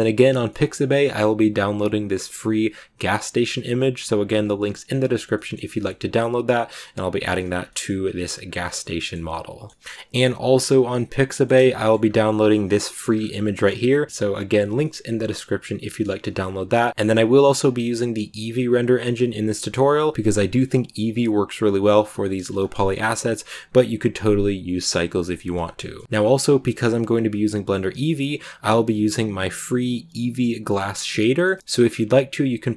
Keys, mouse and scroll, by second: 4.2 scroll up 1, 4.5-5.2 scroll down 2, 5.2 scroll up 1, 5.2 middle click, 5.7-6.4 scroll up 2, 6.4 right click, 7.1-7.5 scroll down 3, 7.5 shift+middle click, 7.9-8.3 scroll up 1, 8.3-8.7 scroll down 3, 8.7-11.9 middle drag, 11.9 scroll up 1, 12.1 middle click, 12.9 a, 13.0 scroll up 2, 14.1-16.1 middle drag, 16.1 right click, 16.2 scroll down 2, 16.5 a, 16.6 shift+middle click, 16.8 scroll down 2, 16.9-22.3 middle drag, 22.3-22.8 scroll up 2, 22.8 shift+middle click, 23.0-26.0 scroll up 1, 26.0-29.8 middle drag, 31.1-32.7 middle drag.